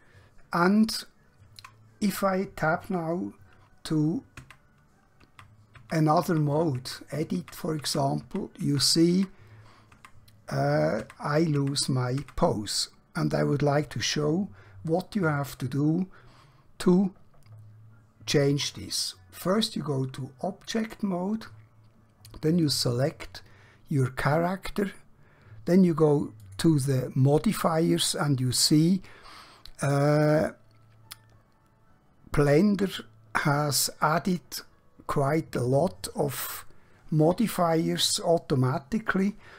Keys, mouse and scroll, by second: 4.5 Tab, 8.4 Tab, 10.1 Tab, 11.1 Tab, 11.7 Tab, 19.5 click, 22.5 click, 26.4 click.